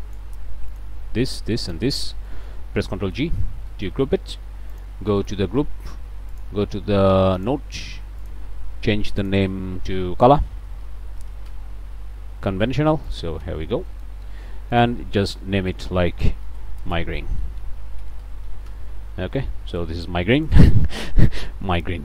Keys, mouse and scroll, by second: 0.7 shift+click, 1.3 shift+click, 1.6 shift+click, 2.3 shift+click, 3.2 ctrl+g, 3.7 ctrl+click, 4.1 scroll up 2, 4.7 click, 6.3 click, 7.4 click, 8.2 click, 9.2 click, 10.7-11.3 typing, 11.5 shift+Return, 13.1 click, 13.4 Tab, 13.9 click, 14.7 click, 16.4-18.2 typing, 18.7 shift+Return, 20.1 click, 21.0 scroll down 2, 21.3 middle click, 21.9 scroll up 2.